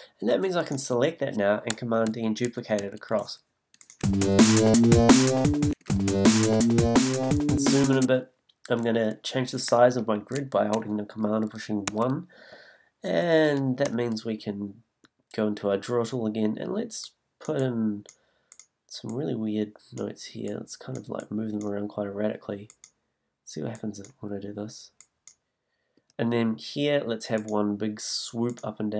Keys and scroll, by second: 4.2 space, 5.7 space, 8.0 space, 13.8 super+b, 14.4 b, 26.0 b.